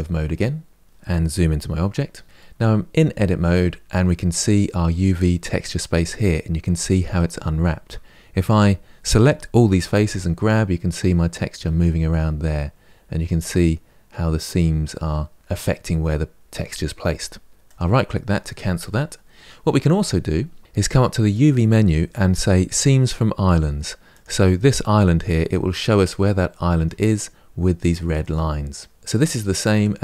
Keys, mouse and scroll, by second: 1.6 KP_Decimal, 2.2-8.2 middle drag, 8.2 a, 9.8 g, 24.0 click, 25.5-29.0 middle drag, 29.5-30.0 middle drag.